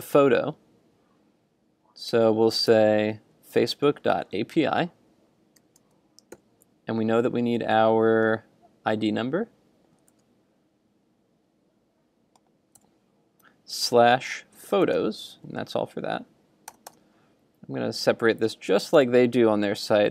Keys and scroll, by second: 10.2 super+c, 13.0 super+v.